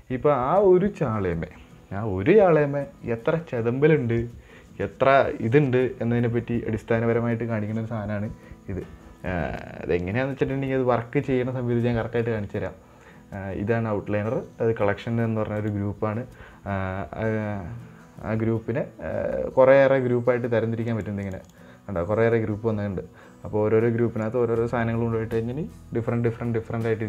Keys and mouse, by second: 15.9 click, 21.3 click, 21.8 drag.